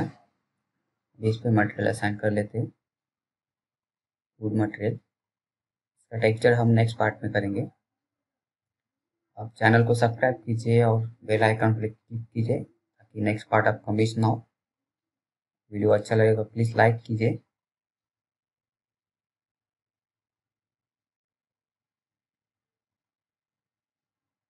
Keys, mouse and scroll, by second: 0.0 click, 5.1-7.0 typing, 8.4 BackSpace, 9.7 d, 10.8 click, 13.2-13.5 scroll down 1, 13.5 click, 18.1 right click, 18.6 click, 18.7 click, 20.1-20.4 scroll down 1, 21.3 alt+middle click, 21.9-22.2 scroll up 1, 22.2 middle click, 23.1 middle click, 24.1 click.